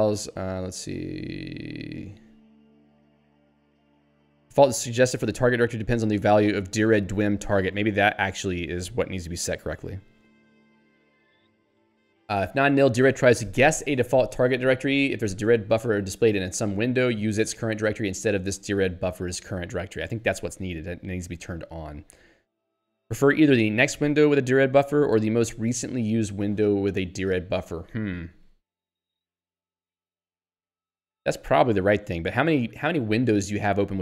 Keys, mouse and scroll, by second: 10.3 click, 10.9 middle click, 17.2 scroll down 1, 21.2 scroll up 1, 22.0 scroll down 1.